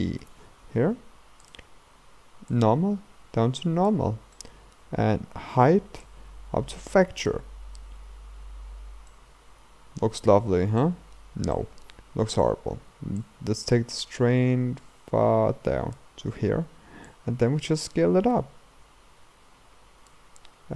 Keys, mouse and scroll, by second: 8.7-9.1 scroll up 1, 9.1-13.4 middle drag, 13.4-20.1 drag.